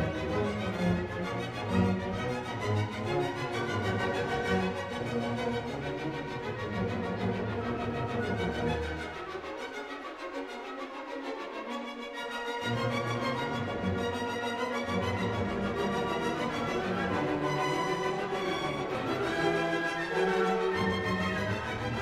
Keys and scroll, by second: 7.1 ctrl+j, 14.3 BackSpace, 18.3 ctrl+g, 18.9 ctrl+a, 21.5 ctrl+d.